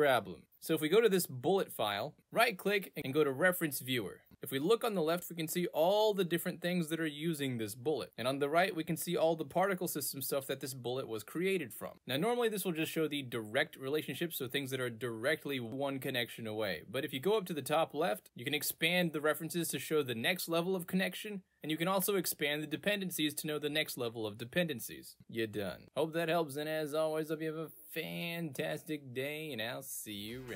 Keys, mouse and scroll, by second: 1.1 click, 1.8 ctrl+space, 2.5 right click, 4.0 click, 4.0 right click, 4.4 click, 5.5 click, 6.4 click, 7.3 click, 9.0 right click, 9.8-10.8 right drag, 11.1 right click, 11.6-13.3 right drag, 14.7-16.0 right drag, 17.7-19.2 drag, 19.8-21.0 right drag, 21.8-23.2 drag, 23.8 right click, 24.5 middle click, 24.5 scroll down 2, 25.1 right click, 26.1 right click, 26.4 middle click, 26.5 scroll up 2, 28.3 right click, 29.4-30.5 right drag.